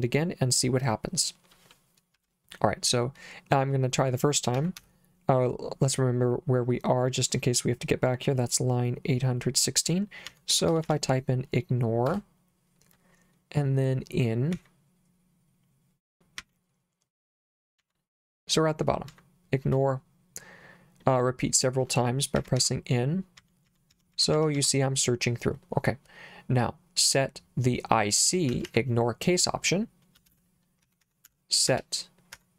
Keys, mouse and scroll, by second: 2.2 /, 4.3-5.3 typing, 10.0-11.4 typing, 12.1 Return, 14.6 n, 16.4 n, 17.8 n, 19.1 n, 22.4-24.6 typing, 28.5 Escape, 28.8 Escape, 30.3-32.5 typing.